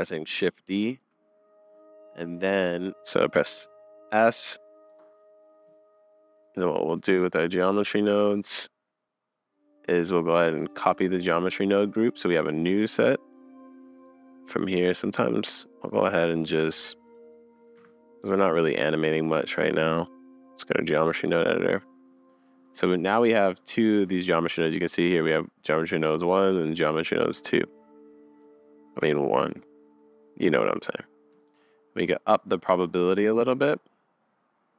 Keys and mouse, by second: 0.6 shift+d, 2.3-2.9 middle drag, 3.0 s, 6.9 click, 10.7 click, 14.1-15.2 drag, 17.8 Escape, 18.4 click, 22.5 click, 23.6 click, 31.7-34.7 shift+middle drag.